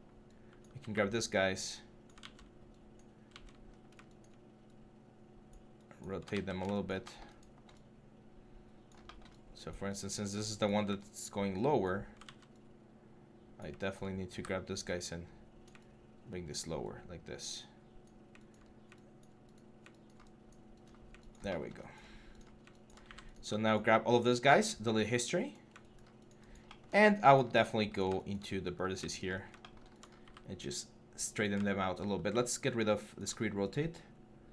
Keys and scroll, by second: 2.0 ctrl+z, 3.1 ctrl+z, 3.5 6, 6.1 ctrl+z, 12.0 ctrl+z, 14.1 w, 15.0 w, 18.4 4, 20.6 6, 22.8 9, 26.8 4, 29.1 6, 30.0 e, 32.1-33.0 typing.